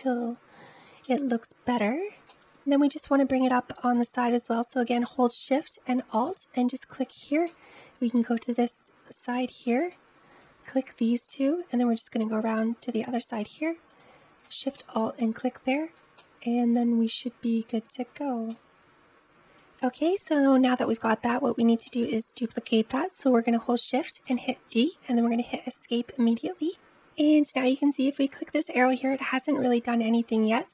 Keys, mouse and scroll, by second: 1.6-2.0 scroll up 1, 2.5 ctrl+z, 6.0 alt+shift+click, 7.3-9.0 middle drag, 9.0 alt+shift+click, 10.4 alt+shift+click, 11.1-12.4 middle drag, 12.4-13.8 scroll up 2, 13.8 alt+shift+click, 14.6-19.1 shift+middle drag, 19.4-19.9 scroll down 5, 19.9-24.0 shift+middle drag, 24.0 shift+d, 28.1 click.